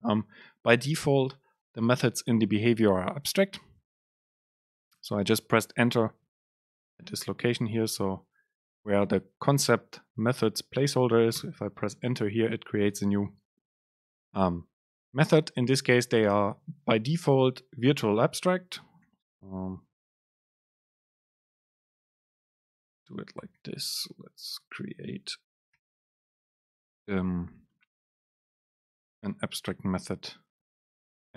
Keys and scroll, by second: 6.7 End, 7.0 BackSpace, 8.1 Left, 11.5 Return, 21.7 BackSpace.